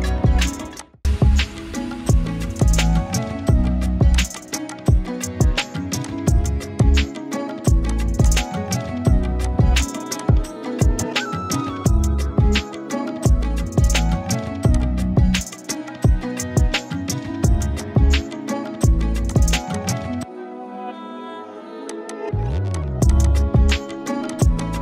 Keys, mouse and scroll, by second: 2.6 shift+click, 4.2 click, 6.5-10.1 typing, 6.8 click, 7.9 click, 8.2-9.7 click, 9.4 click, 9.8 click, 10.2 click, 16.6 ctrl+space, 17.8-18.4 alt+drag, 23.6 space, 23.7 click, 24.1 z, 24.3 click, 24.5 space, 24.6 click.